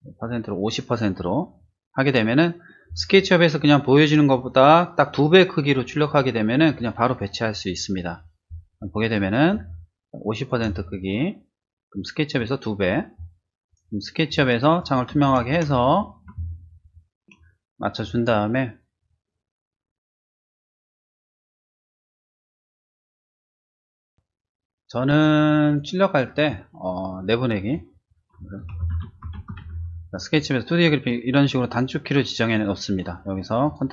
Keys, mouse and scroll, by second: 9.5 space, 9.7 click, 10.7-12.0 drag, 13.7 click, 14.2 ctrl+shift+z, 15.0 shift+middle click, 15.5 shift+z, 15.6 click, 15.9 middle click, 18.3 shift+click, 25.7 click, 26.4 click, 27.6 click, 28.7-29.5 typing, 31.6 click, 33.6 click.